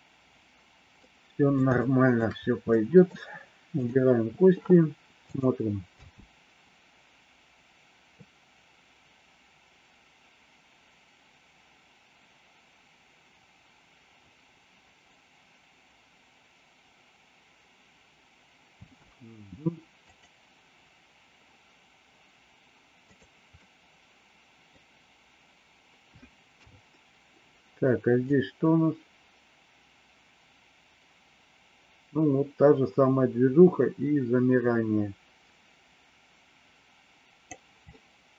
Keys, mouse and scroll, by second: 1.0 middle click, 1.7 shift+middle click, 2.7 middle click, 5.9 space, 18.8 space, 20.0 click, 23.0 click, 23.5-24.7 middle drag, 28.1-37.4 drag, 37.9-38.3 middle drag.